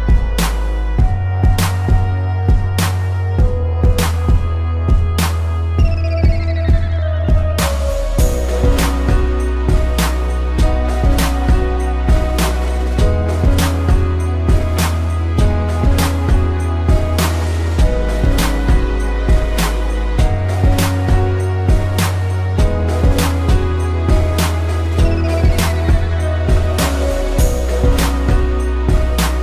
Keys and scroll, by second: 1.8 space, 6.5 space, 12.8 space, 13.5 ctrl+=, 14.6 space, 18.0 space, 22.0 space, 25.6 ctrl+=, 26.2 space.